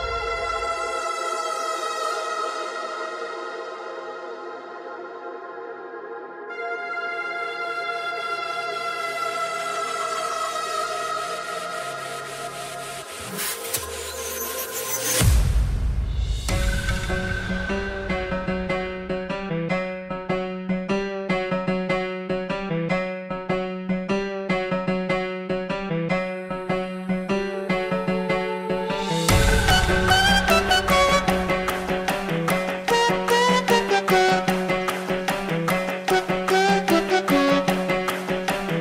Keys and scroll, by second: 2.5 ctrl+t, 23.2 2, 23.4 2, 35.7 ctrl+g.